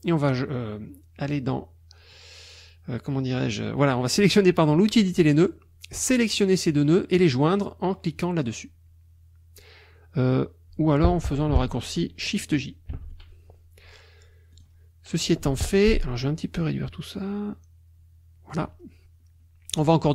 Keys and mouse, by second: 5.0 click, 5.9 click, 12.9 shift+j, 14.5 click, 16.2-18.7 drag.